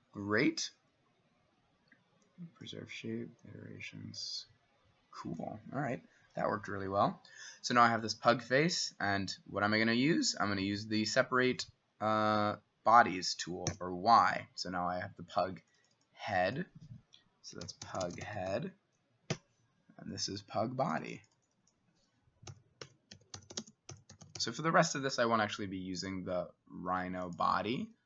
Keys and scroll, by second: 13.7 y, 17.4-19.0 typing, 19.3 Return, 22.5-24.9 typing.